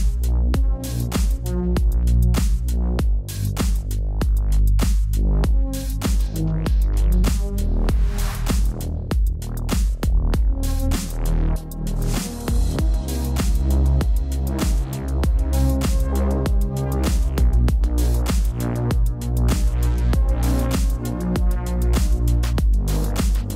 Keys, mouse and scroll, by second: 0.8 right click, 1.6 click, 3.7 t, 3.7 click, 5.1 Return, 5.7 click, 7.9 ctrl+a, 8.1 click, 9.2 right click, 9.5 click, 10.7 click, 11.3 ctrl+t, 12.3 click, 13.1 click, 13.4 click, 14.8 click, 15.7 click, 17.7 Return, 17.8 click.